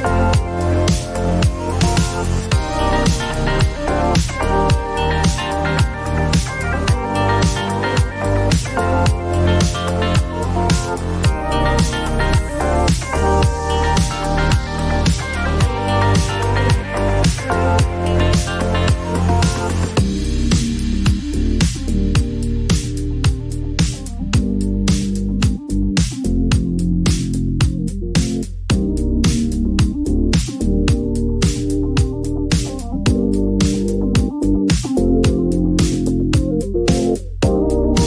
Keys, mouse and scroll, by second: 2.0 click, 3.6 click, 5.1 alt+click, 7.0 click, 8.1 typing, 12.7 click, 14.3 click, 15.8 alt+click, 17.1-18.5 typing, 20.1 click, 20.2 click, 21.7-23.6 typing, 24.6 Right, 25.7 ;, 28.3 click, 32.9 click, 34.9 click, 36.4 click, 37.5 click.